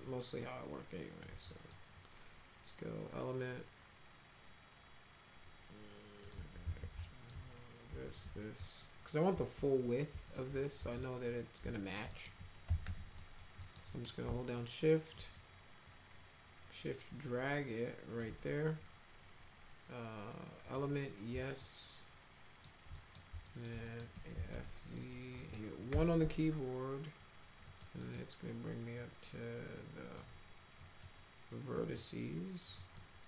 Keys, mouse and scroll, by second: 1.5 middle drag, 6.3 click, 6.6 ctrl+z, 7.1 alt+middle click, 8.1 ctrl+click, 8.6 middle click, 10.3 ctrl+click, 10.9 middle click, 11.7 alt+middle click, 12.1 middle click, 12.4-13.4 typing, 13.2 middle drag, 13.6 middle click, 14.0 middle click, 15.2 shift+click, 15.9-18.2 shift+drag, 20.7 click, 21.6-22.7 alt+middle drag, 22.9 middle click, 23.5 alt+middle click, 23.9 middle click, 24.1-25.9 typing, 25.0 middle click, 25.4 middle click, 27.7 click, 28.0 middle click, 29.0-30.2 drag, 30.8 click, 32.0-32.8 drag, 33.0 middle drag.